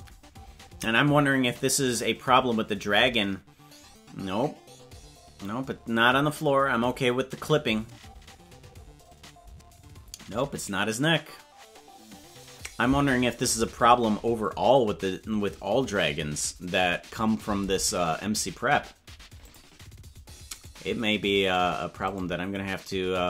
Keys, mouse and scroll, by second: 19.4 click, 20.7 right click, 21.6-23.2 right drag.